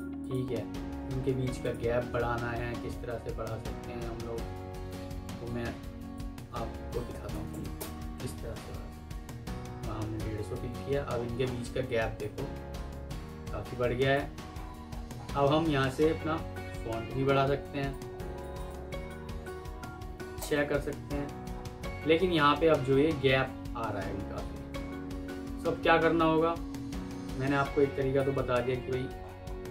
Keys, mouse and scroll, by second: 7.0-7.4 typing, 7.7 Return, 10.8 alt+scroll down 1, 14.4-14.8 alt+scroll up 1, 15.8 alt+scroll down 1, 20.0 typing, 20.3 Return, 21.2 Return, 21.4-22.0 alt+scroll up 1, 24.0 ctrl+z, 25.2 F3, 26.3 alt+scroll up 1, 27.6 F2, 28.5 Escape, 29.1-29.7 alt+scroll up 3.